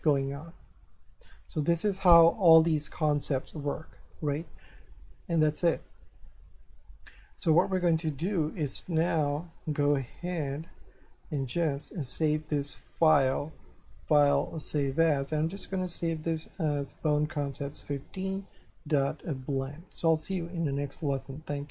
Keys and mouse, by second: 0.8 click, 2.1 middle click, 3.9 ctrl+n, 7.0 shift+middle click, 8.7 shift+middle click, 10.6 shift+middle click, 13.7 click, 15.1 click, 17.4 click, 19.3 click.